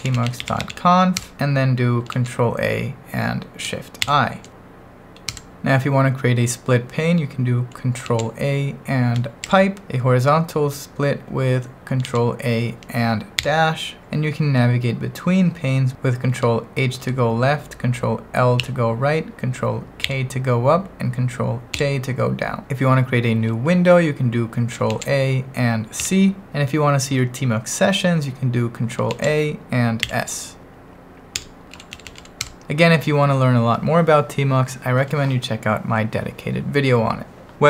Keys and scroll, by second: 0.0-1.2 typing, 1.2 Return, 2.1 ctrl+a, 4.0 shift+i, 5.4 Return, 8.0 ctrl+a, 9.4 shift+\, 12.0 ctrl+a, 13.4 -, 17.0 ctrl+h, 18.6 ctrl+l, 20.0 ctrl+k, 21.8 ctrl+j, 24.9 ctrl+a, 26.0 c, 29.1 ctrl+a, 30.0 s, 31.4 Escape, 31.5-32.7 typing.